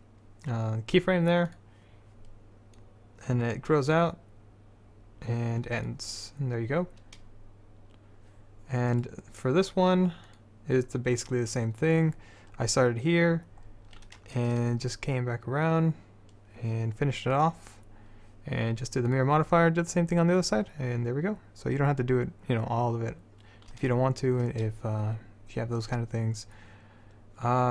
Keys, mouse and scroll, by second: 2.9-4.8 drag, 9.1 click, 10.4 click, 10.4 right click, 10.8-12.2 middle drag, 12.2-13.8 drag, 13.8-17.5 middle drag, 17.5-24.2 drag.